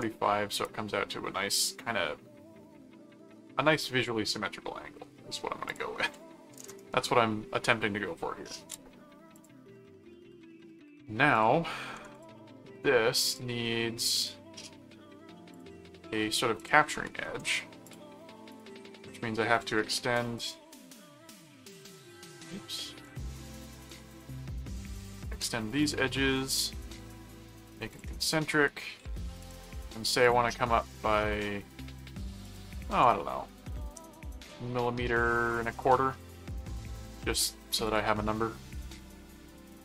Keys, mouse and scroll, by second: 5.7 click, 8.7 space, 9.3 click, 11.3 click, 12.1 click, 13.3 click, 14.2 click, 15.5 click, 16.6 click, 17.8 click, 18.5 click, 19.5 click, 20.4 click, 21.8 click, 23.9 click, 25.1 click, 25.8 ctrl+click, 26.4 ctrl+click, 27.9 click, 28.4 right click, 29.4 click, 30.2 click, 32.4 click, 37.8 click.